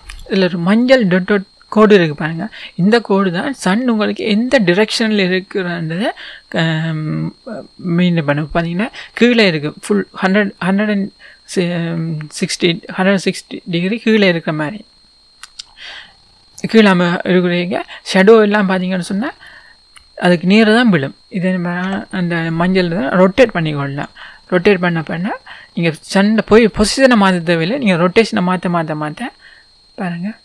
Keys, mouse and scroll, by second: 4.0-5.1 scroll down 1, 18.6-19.0 scroll down 2, 19.0-24.1 middle drag, 20.2-21.8 scroll up 2, 21.8 KP_1, 24.1 r.